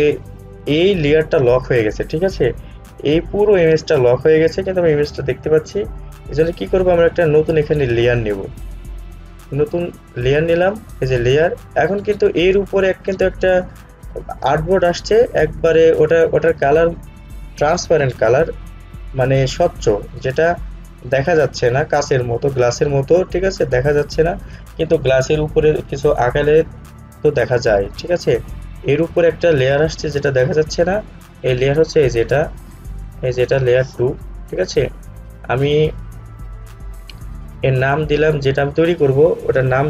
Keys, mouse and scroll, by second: 9.4 click, 32.1 click, 38.1-39.8 drag.